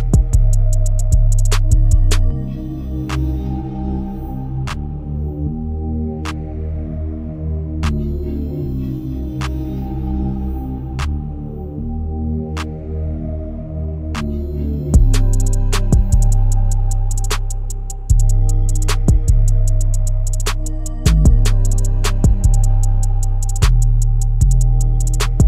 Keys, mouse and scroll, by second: 0.2 click, 1.5 click, 2.0 scroll down 3, 2.5-2.9 middle drag, 2.9-5.1 scroll down 1, 5.1-9.2 drag, 9.2-9.6 scroll up 6, 9.6 middle click, 10.5 KP_0, 11.0-11.5 scroll up 3, 11.5-12.1 scroll down 6, 12.1-14.2 middle drag, 14.2-14.7 scroll up 4, 14.9 KP_0, 15.4-16.6 scroll up 8, 18.9-22.1 drag, 22.1-22.9 scroll down 6, 22.9-23.6 scroll down 3, 23.6 scroll down 1, 23.8-25.4 scroll up 10.